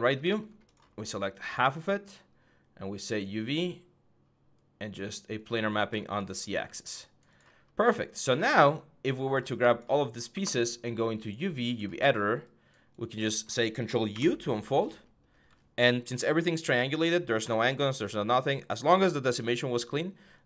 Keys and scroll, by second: 6.1 6, 13.9 ctrl+u.